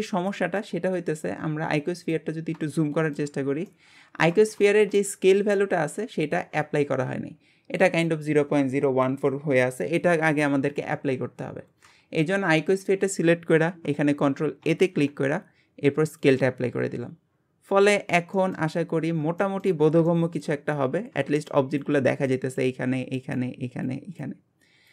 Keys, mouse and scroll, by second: 0.3 shift+middle click, 0.7-1.8 scroll up 5, 1.8 scroll up 1, 2.0 click, 2.7 shift+middle click, 3.4-3.7 scroll up 1, 3.7-12.0 shift+middle drag, 17.3-17.9 scroll down 1, 17.9-18.4 scroll up 1, 18.4 middle click, 18.8-19.4 scroll down 1, 19.4 shift+middle click, 19.8 scroll down 1, 20.1-24.9 shift+middle drag.